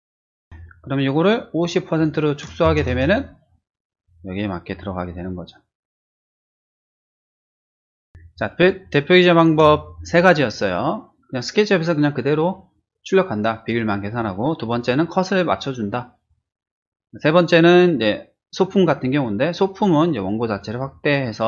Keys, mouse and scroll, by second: 0.2 ctrl+-, 0.5 ctrl+t, 1.9 click, 2.6 typing, 2.9 Return, 4.0-4.4 drag, 4.7 click, 6.7-7.2 drag, 7.3 Return, 8.1 space, 8.3-9.4 drag.